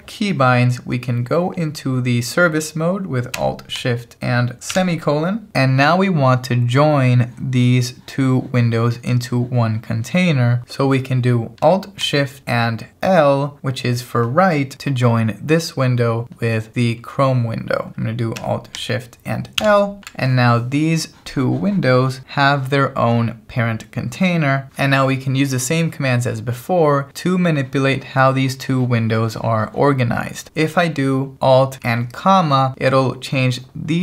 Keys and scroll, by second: 4.7 alt+shift+;, 19.7 alt+shift+l.